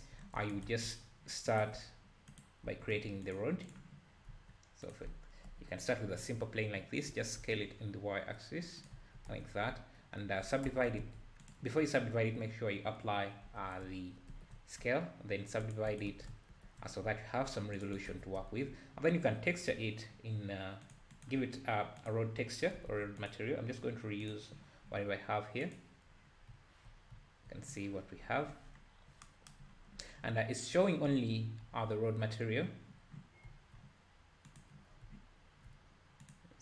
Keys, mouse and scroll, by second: 0.5-2.6 shift+right drag, 3.7 shift+a, 4.3 s, 5.4 KP_Decimal, 5.9 scroll down 3, 6.1 `, 7.2 s, 9.3 Tab, 9.6-10.4 scroll up 1, 10.4 scroll up 1, 10.7 Tab, 11.5 ctrl+a, 13.4 Tab, 14.3 ctrl+r, 16.1 alt+a, 16.5 ctrl+r, 18.1 Tab, 18.4 `, 20.9-23.0 drag, 23.0 ctrl+z, 23.5-25.8 drag, 26.5 `, 27.1 `, 30.8 `, 31.6 `, 33.5 `, 34.6 click, 34.9 scroll down 1, 35.1 `.